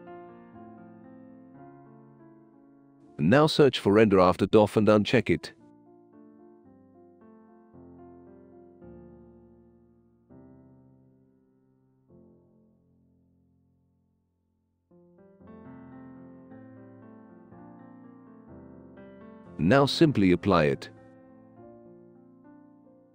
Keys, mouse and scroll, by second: 0.2 right click, 1.4 click, 1.7 click, 2.2 r, 2.7 e, 13.0 click, 14.3 click, 15.6 click, 16.3 click, 17.4 click, 19.0 click, 22.5 click, 22.5 right click.